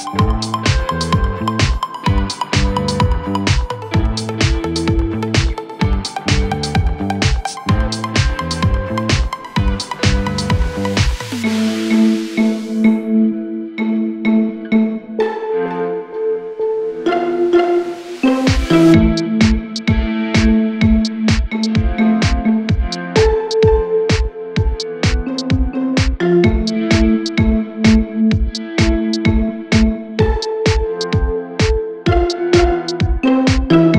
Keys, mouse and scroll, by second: 0.1 click, 0.3 g, 1.0 scroll up 5, 1.2 middle click, 1.7-2.2 scroll up 2, 1.8 click, 2.2 middle click, 2.5 scroll up 2, 2.7 middle click, 3.0 scroll down 2, 3.2 Tab, 3.6 click, 3.7-4.3 scroll up 3, 3.8-4.2 middle drag, 4.3-5.0 middle drag, 5.0-5.3 scroll down 5, 5.3 middle drag, 5.6 scroll up 5, 5.8 middle click, 6.3 alt+x, 6.7 click, 7.4 middle click, 8.3 scroll up 2, 8.4 click, 8.5 middle click, 8.7-9.0 scroll down 1, 9.0 scroll up 1, 9.1-9.6 scroll down 1, 9.6 Tab, 10.3-10.6 drag, 10.6 shift+a, 12.3 KP_1, 13.0 middle click, 13.4 KP_1, 13.5 KP_3, 13.8 r, 14.7-15.7 drag, 15.8 s, 16.2 s, 17.0 scroll up 2, 17.1 middle drag, 17.3-18.0 scroll down 4, 18.0-19.0 scroll up 1, 19.0 Tab, 19.7 middle click, 19.9 Tab, 20.4 click, 20.6 middle click, 21.0 ctrl+click, 21.2 middle click, 21.6 scroll up 4, 21.7-22.6 scroll down 3, 21.8 middle click, 22.6 i, 23.4 Escape, 23.5 click, 23.7 middle click, 24.4 click, 24.6 middle click, 24.9 ctrl+click, 25.2 middle click, 25.9 shift+click, 26.1-26.6 shift+scroll up 2, 26.1 middle click, 26.6 scroll down 1, 27.3 i, 28.5 scroll up 1, 28.6 middle click, 29.0-29.6 right drag, 29.6 click, 29.7 middle click, 30.5 Tab, 31.2 s, 32.2 middle click, 32.9-33.9 drag.